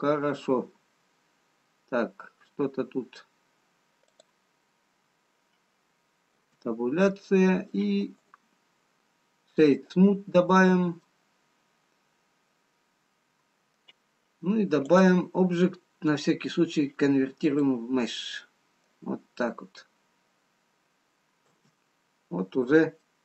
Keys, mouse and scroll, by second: 2.7-3.4 scroll up 5, 3.8-4.9 scroll down 2, 4.9 click, 4.9-6.4 scroll down 1, 7.3 Tab, 8.1 middle click, 9.2 right click, 11.2-12.3 scroll down 2, 12.3 middle click, 16.0 click, 18.8 middle click, 22.0 Tab, 22.9-23.2 scroll up 2.